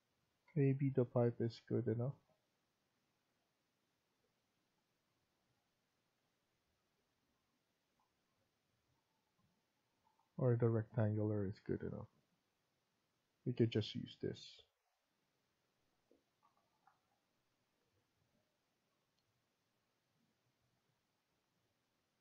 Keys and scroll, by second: 0.3 Escape, 0.6 Escape, 11.0 Escape.